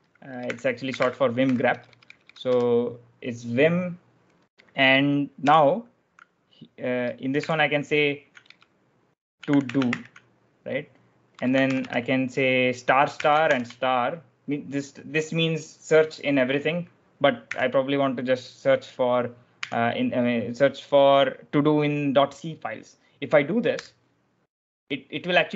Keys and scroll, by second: 0.2-2.4 typing, 5.4 /, 6.9 BackSpace, 8.4-13.8 typing, 17.4 ., 19.4 c, 23.7 Return.